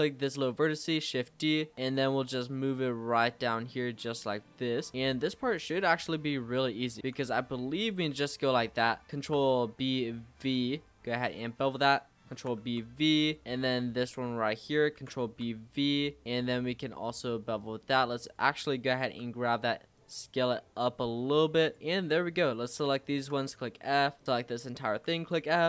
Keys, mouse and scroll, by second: 1.0 e, 2.0 e, 4.9 e, 7.0 e, 8.7 click, 9.0 ctrl+b, 11.8 click, 12.3 ctrl+b, 13.4 click, 13.9 g, 15.0 ctrl+b, 17.6 click, 19.1 g, 20.1 s, 22.4 click, 23.0 shift+click, 23.5 f, 24.2 click, 24.2 l, 24.9 f, 25.4 z.